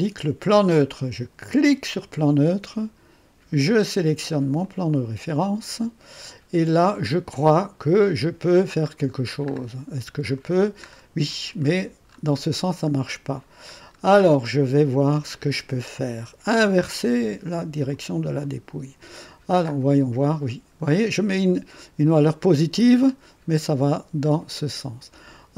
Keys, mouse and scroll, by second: 1.7 click, 4.6 click, 7.0-7.6 scroll down 1, 7.7-8.0 scroll down 2, 8.8 scroll up 2, 9.4-9.8 scroll up 2, 10.2 scroll up 2, 10.8-12.6 scroll down 7, 12.8-13.5 scroll up 2, 13.8-14.2 scroll down 1, 17.9 click, 19.2-19.5 scroll down 2, 19.6-19.9 scroll up 2, 20.8-21.1 scroll up 2, 22.9 scroll up 2, 24.2-25.5 drag.